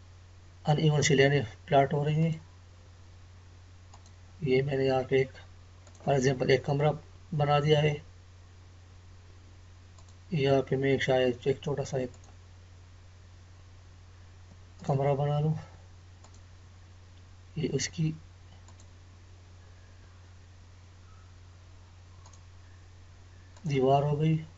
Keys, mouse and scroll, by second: 1.5 scroll up 1, 2.2 click, 7.1-8.3 scroll down 1, 9.9 click, 18.6 click, 22.2 click.